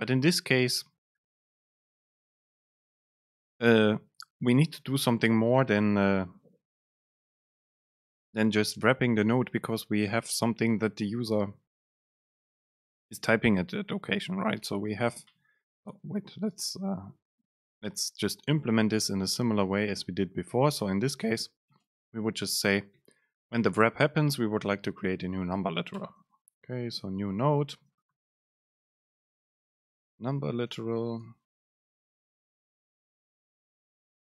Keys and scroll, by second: 15.3 Down, 15.8 Up, 16.7 super+space, 22.0 super+space, 26.2 BackSpace, 28.1 super+space, 29.9 BackSpace, 30.4 Right, 31.6 BackSpace, 33.9 super+space.